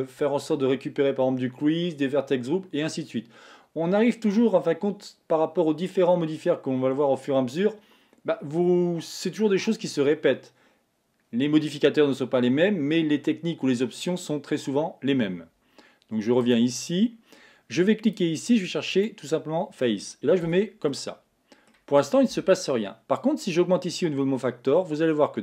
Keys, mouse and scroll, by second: 16.5 click, 18.1-20.5 drag, 20.5 Tab, 21.0-23.3 middle drag, 23.3-25.4 drag.